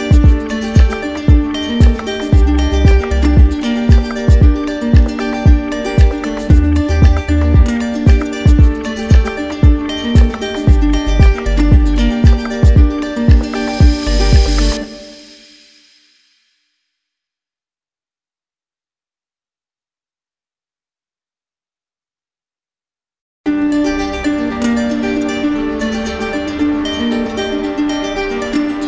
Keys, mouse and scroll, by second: 0.7 alt+click, 1.1 shift+click, 3.9 click, 4.4 alt+click, 6.4 q, 8.4 click, 9.3 alt+right click, 11.1 right click, 13.7 click, 18.5 click, 19.1 click, 20.4 click, 21.5 click, 22.2 click, 22.8 alt+click, 23.4 alt+click, 24.0 click, 25.5 ctrl+click, 26.0 ctrl+click, 26.7 w.